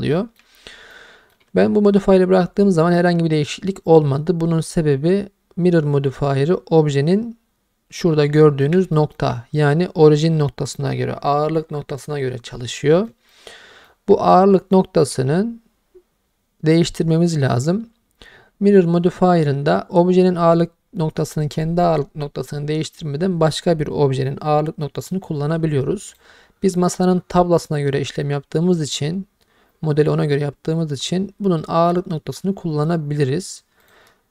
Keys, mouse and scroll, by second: 0.1 middle click, 0.9-1.3 ctrl+middle drag, 8.0 scroll up 1, 8.5 shift+middle drag, 9.0 ctrl+middle click, 12.8 middle click, 13.3-13.9 ctrl+middle drag, 14.8 shift+middle drag, 17.4-17.8 scroll down 1, 26.1 click, 33.8 click.